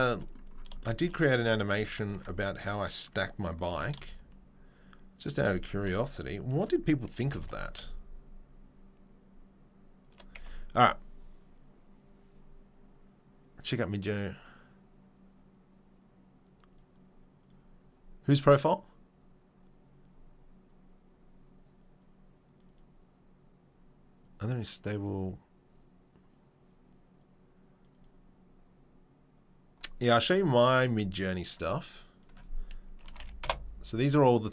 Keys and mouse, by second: 1.9 ctrl+click, 2.1 ctrl+r, 2.2-6.3 middle drag, 3.7 ctrl+b, 5.7 2, 6.3 right click, 6.3-31.3 middle drag, 7.2 g, 10.4 Tab, 31.5-34.5 middle drag.